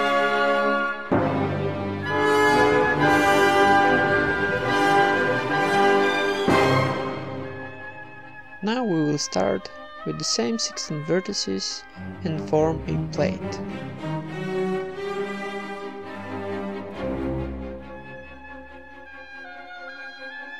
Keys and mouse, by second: 0.1 Tab, 0.4 middle click, 0.9 Tab, 1.0 click, 1.1 ctrl+KP_Add, 1.6 alt+s, 2.4 ctrl+KP_Add, 2.7 alt+s, 3.3 s, 4.0 right click, 4.3 ctrl+KP_Add, 4.7 alt+s, 5.2 Tab, 5.2 middle click, 6.3 Tab, 7.3 a, 7.5-9.0 right drag, 8.3 alt+s, 9.0 Tab, 9.0-11.5 typing, 9.8 ctrl+Tab, 10.5 right click, 11.8 Tab, 12.0 click, 12.2 Tab, 12.7 a, 12.9 middle click, 12.9 s, 14.0-15.6 middle drag, 14.4 KP_1, 15.6 s, 16.8-17.8 middle drag, 17.1 e, 17.5 alt+m, 18.2-20.5 typing, 18.5 right click.